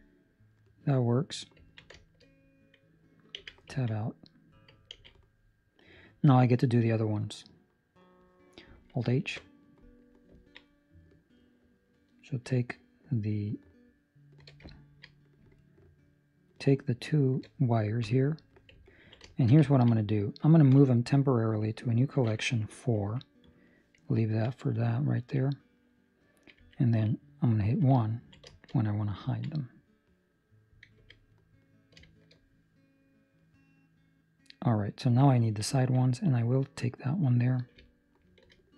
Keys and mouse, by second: 1.6 ctrl+middle click, 1.9 shift+middle click, 3.3 Tab, 3.7 ctrl+middle click, 3.9 ctrl+middle click, 4.9 ctrl+s, 5.1 middle click, 9.2 alt+h, 9.7 middle click, 10.3 ctrl+middle click, 10.8 right click, 11.7 right click, 14.4 shift+right click, 15.0 ctrl+middle click, 19.4 shift+middle click, 19.8 ctrl+middle click, 27.9 1, 28.2 ctrl+middle click, 28.4 shift+middle click, 28.8 right click, 29.2 ctrl+middle click, 29.4 middle click, 30.9 Tab, 31.3 middle click, 32.0 shift+middle click, 32.3 middle click, 35.2 ctrl+middle click, 35.8 ctrl+middle click, 36.4 right click, 37.9 alt+right click, 38.6 alt+shift+right click.